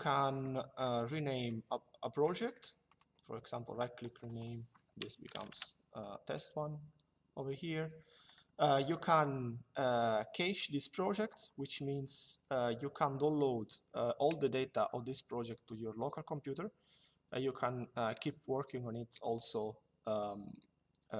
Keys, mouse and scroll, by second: 0.5 right click, 1.2 click, 2.2 right click, 2.5 click, 3.9 click, 4.8 Right, 5.0 1, 5.2 KP_Enter, 7.9 right click.